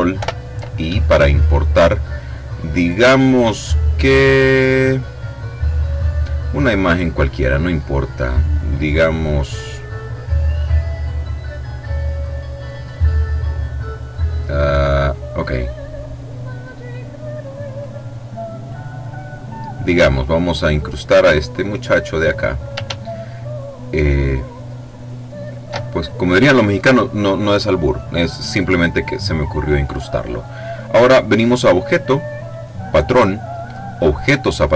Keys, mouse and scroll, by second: 0.1 ctrl+i, 6.4 click, 7.5-8.1 scroll down 2, 8.7-9.6 scroll down 2, 11.5-12.3 scroll down 2, 12.3-13.9 scroll down 1, 14.9 click, 17.3 click, 18.4 click, 19.9 click, 21.0-22.6 drag, 23.1-26.1 ctrl+shift+drag, 31.2 click, 34.1 click.